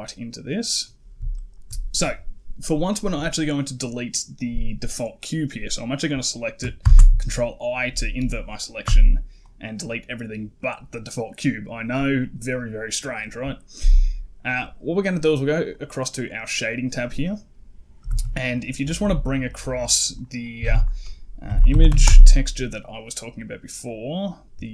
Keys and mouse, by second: 1.2 shift+middle drag, 2.7 right click, 6.7 ctrl+i, 8.7 x, 11.6 right click, 20.5 shift+a.